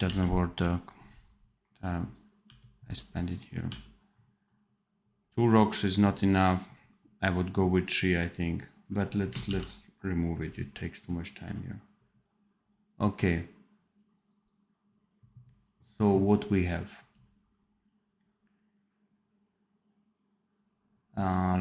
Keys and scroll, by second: 0.0 ctrl+s, 3.6 l, 9.4 ctrl+s.